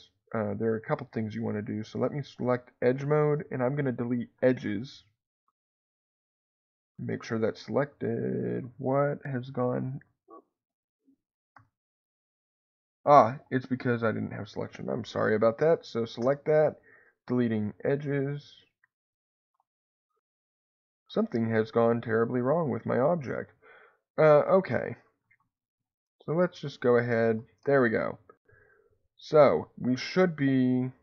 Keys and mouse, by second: 9.3 middle click, 12.9 click, 13.9 click, 18.1 click, 22.4 middle click, 24.2 ctrl+z, 24.4 ctrl+z, 26.0 ctrl+z, 27.2 ctrl+shift+z.